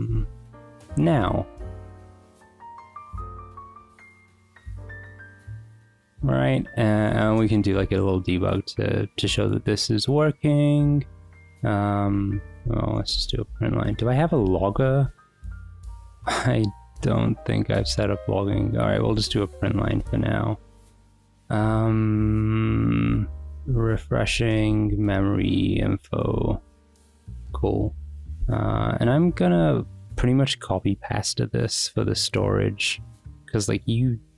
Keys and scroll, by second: 0.0 n, 0.3 Return, 0.8 Escape, 1.0 j, 1.8 n, 2.0 ;, 2.2 Escape, 3.6 w, 3.9 Return, 6.0-8.6 typing, 7.0 Return, 12.0-16.2 typing, 13.8 Escape, 17.5 BackSpace, 18.6-21.1 typing, 23.0-30.8 typing, 26.1 Escape, 26.5 Escape.